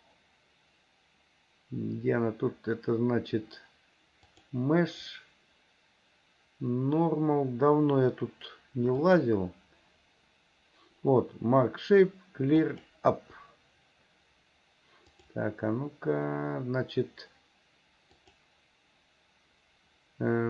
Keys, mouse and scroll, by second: 4.3-12.9 drag, 15.2-17.5 drag, 18.2-20.4 drag.